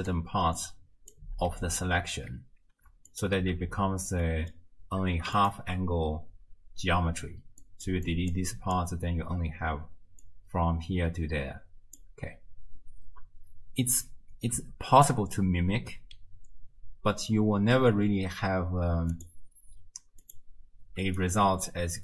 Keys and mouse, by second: 0.6 click, 3.1 alt+shift+click, 4.4 click, 5.4 ctrl+shift+click, 6.9-12.3 typing, 7.7 click, 8.1 click, 8.5 click, 10.2-12.0 drag, 19.2 click, 20.2 click, 21.0 d.